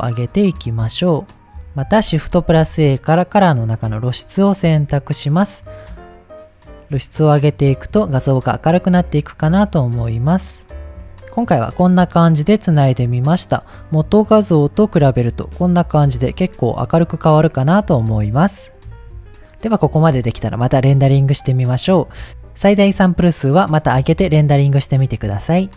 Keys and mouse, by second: 2.0 shift+a, 6.0 click, 6.9 click, 7.3 click, 7.9 click, 8.3 click, 8.7 click, 9.0 click, 9.3 click, 10.5 click, 10.7 click, 11.0 ctrl+z, 13.5-14.9 drag, 15.8-16.7 drag.